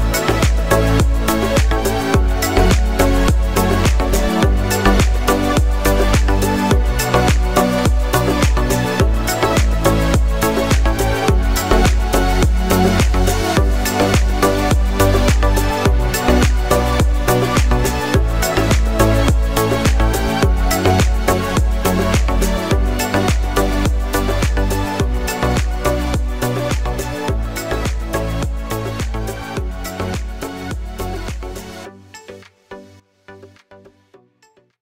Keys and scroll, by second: 12.8 ctrl+a, 14.2 ctrl+0.